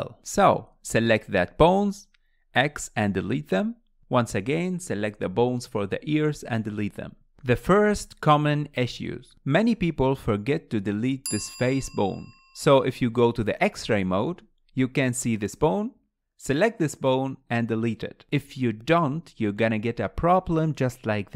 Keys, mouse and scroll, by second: 0.5 scroll up 3, 0.8-1.8 shift+middle drag, 1.8 click, 4.2 x, 4.5 KP_1, 5.4 click, 5.9 x, 6.6-7.5 scroll up 3, 7.5 click, 8.3 click, 9.2 KP_Decimal, 10.1 scroll down 1, 10.3-17.1 middle drag, 10.4-11.2 scroll up 3, 11.2 scroll up 1, 11.3 click, 12.1 click, 13.0 KP_Decimal, 13.9 scroll down 1, 16.3-17.1 scroll down 4, 17.1 x, 18.1-18.7 scroll down 7, 18.7-21.1 middle drag, 21.1 KP_1.